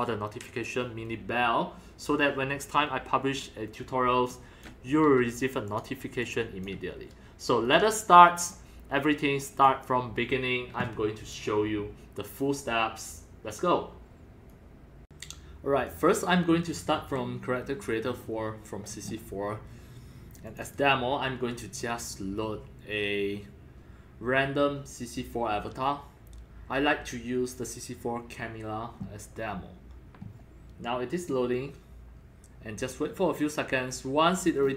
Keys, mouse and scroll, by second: 3.9 alt+click, 4.7 alt+drag, 4.9 middle click, 5.7 click, 7.6 click, 8.3 click, 9.5 click, 9.9-13.6 drag, 14.5 click, 15.2 click, 15.9 click, 16.5-18.9 drag, 20.5 click, 20.6 click, 34.6-34.7 scroll up 15.